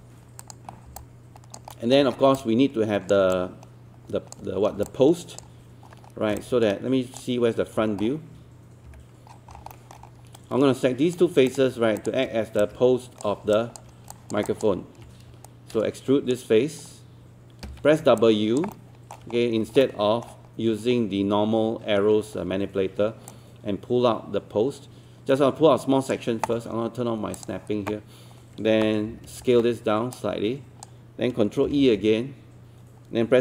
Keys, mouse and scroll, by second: 0.7 scroll down 1, 1.0 alt+click, 1.7 alt+middle click, 2.1 scroll down 1, 2.4 alt+click, 3.3 alt+click, 4.7 scroll up 1, 4.9-6.0 alt+drag, 6.1-6.4 scroll down 1, 6.4 click, 7.8 scroll down 1, 8.9 f, 9.3 scroll down 1, 9.7 alt+middle click, 10.1 scroll up 1, 10.4 right click, 11.5 click, 12.0 shift+click, 14.0 scroll up 1, 15.5-17.0 shift+right drag, 17.7 w, 18.2 alt+click, 18.7 alt+middle click, 19.3-19.7 scroll up 1, 19.8-21.0 alt+middle drag, 23.3-27.0 drag, 29.1 e, 30.2 click, 31.7 ctrl+e.